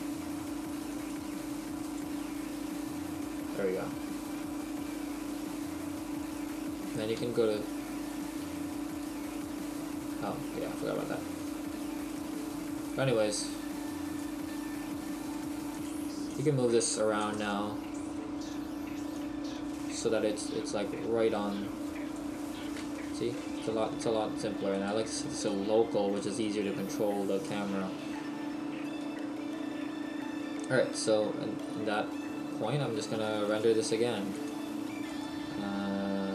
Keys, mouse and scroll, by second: 4.4-4.9 scroll down 1, 5.4 Tab, 6.3 right click, 7.2 shift+f, 8.1 right click, 8.4 f, 8.9 right click, 10.7 middle click, 12.1 right click, 13.0 click, 15.4 right click, 17.3 KP_0, 19.4 click, 22.5-23.2 scroll down 3, 23.0 shift+middle click, 24.8 click, 29.1 middle click, 33.5 right click, 34.3 click, 35.1 right click.